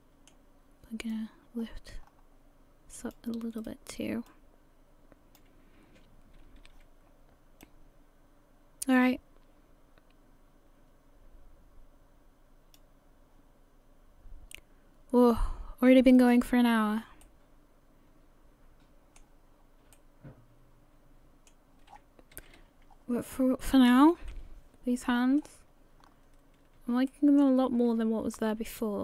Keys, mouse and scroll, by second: 1.1 click, 3.6 right click, 4.3 click, 5.8-6.4 scroll down 2, 6.4 a, 6.6 a, 16.2 click, 16.8-17.2 scroll down 3, 17.2 middle click, 19.6-19.9 scroll up 1, 19.9 middle click, 21.9 scroll down 6, 22.3 a, 22.6 a, 22.9-23.4 scroll down 4, 24.2 KP_1, 25.1-26.5 scroll up 17, 26.5-26.8 scroll up 3, 27.1 shift+middle click.